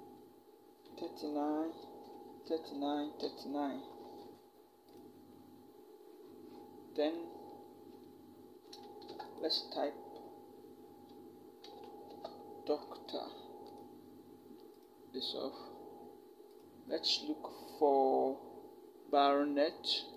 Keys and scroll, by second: 1.6-3.0 typing, 8.9 t, 11.4 shift+d, 11.9 r.